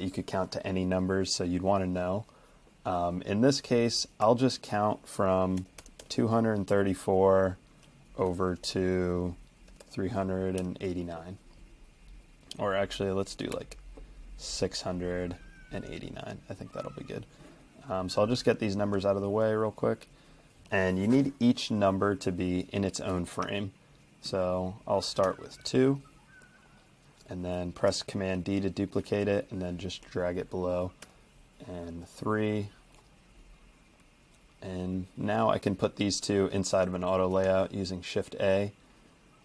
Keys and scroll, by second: 4.2 t, 5.4-6.5 typing, 6.6 Escape, 9.5-11.1 typing, 13.3-14.0 typing, 15.9 Escape, 23.4 t, 25.3 typing, 25.6 Escape, 27.9 super+d, 31.0 3, 37.3 shift+a.